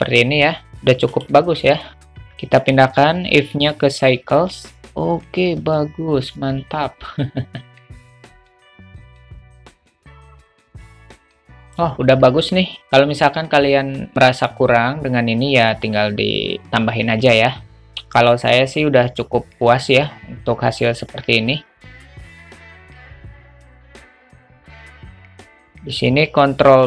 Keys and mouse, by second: 0.0 click, 1.1-1.5 drag, 2.7-4.0 drag, 8.6 click, 9.0 g, 9.8 click, 21.9 click, 23.9 click, 25.0 click, 26.8 ctrl+b.